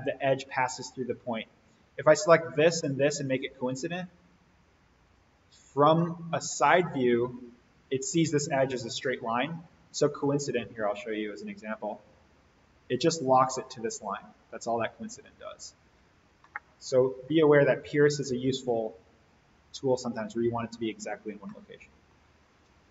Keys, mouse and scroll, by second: 2.2 click, 5.0 ctrl+click, 7.3-9.4 scroll down 1, 11.3-16.1 drag, 16.4-17.1 middle drag, 17.8 ctrl+click, 19.5 click, 20.9-21.4 scroll up 1, 21.4-22.1 middle click, 22.1-22.9 scroll up 1.